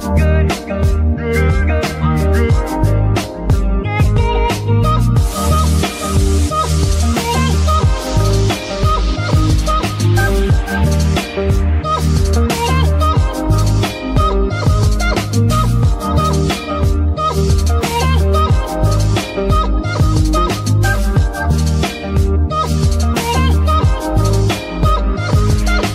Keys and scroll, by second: 0.6 ctrl+v, 1.3 g, 1.8 Escape, 7.4 g, 7.8 Escape, 8.5 v, 9.4 g, 9.8 Escape, 12.3 ctrl+c, 13.3 g, 13.9 Escape, 14.8 v, 15.5 g, 15.9 Escape, 19.5 z, 24.0 ctrl+s.